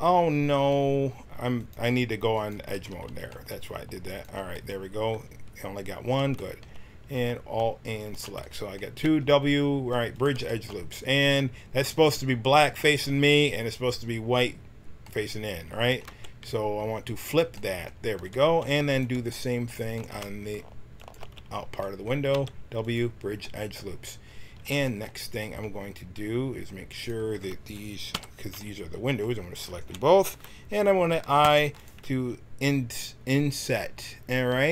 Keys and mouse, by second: 0.2 click, 2.7 a, 3.0 a, 4.0 click, 4.5-5.8 middle drag, 7.9-10.2 drag, 9.0 w, 16.0 t, 17.1 click, 17.5-20.9 right drag, 20.9-22.9 drag, 22.2 w, 26.9-28.1 drag, 28.1 l, 28.5 click, 28.9-30.5 middle drag, 31.4 i.